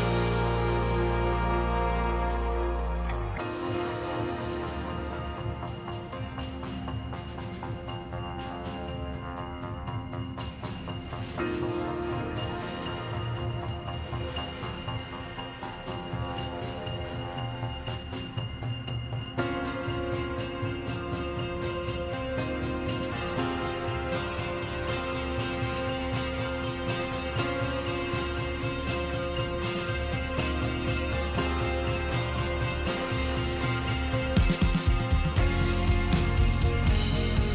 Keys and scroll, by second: 0.2 z, 1.8 space, 2.4 2, 3.1 2, 5.5 space, 6.7 x, 8.0 z, 10.5 space, 12.1 space, 13.4 1, 14.0 1, 14.8 space, 16.8 z, 18.1 s, 18.5 KP_Decimal, 18.7 KP_6, 18.9 KP_2, 20.0 KP_5, 20.1 Return, 20.7 z, 21.7 m, 25.0 q, 26.0 a, 26.6 space, 27.6 3, 28.9 space, 31.1 x, 31.8 z, 32.6 s, 34.3-36.8 typing, 34.4 Return.